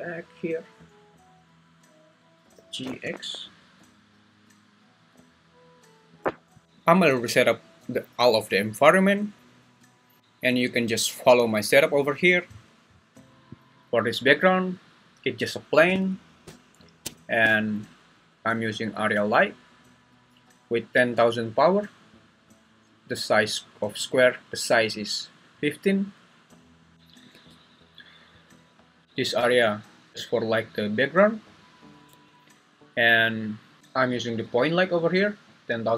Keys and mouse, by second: 0.4 click, 1.1 `, 2.5 g, 2.9 x, 6.5 s, 18.4 click, 26.9 Escape, 26.9 g, 27.3 `, 29.4 g, 32.1 Escape, 33.8 g.